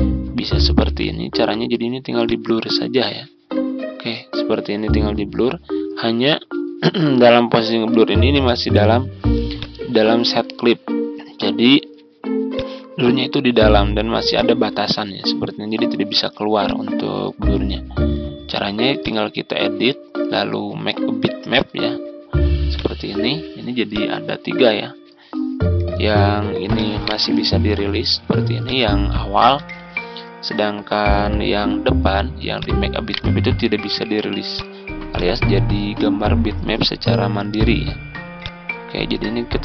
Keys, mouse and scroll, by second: 0.7 ctrl+z, 2.1-24.6 drag, 26.0 ctrl+z, 26.6 click, 26.9 right click, 28.5 click, 29.4 ctrl+z, 31.0 Delete, 32.4 click, 32.9 right click, 34.4-39.6 drag.